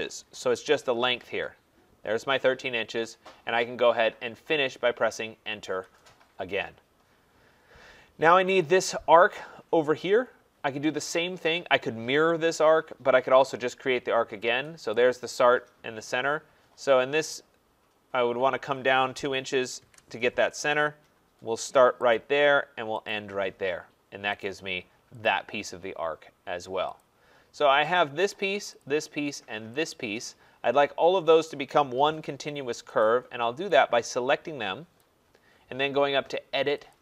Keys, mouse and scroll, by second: 0.0-0.1 typing, 0.5 Return, 8.6 click, 15.1 click, 19.2 2, 19.7 shift+', 19.8 Return, 22.2 click, 23.1 click, 24.4 click, 25.3 click, 27.0 click, 28.0 click, 28.8 click, 29.9 click, 33.0 click, 36.9 click.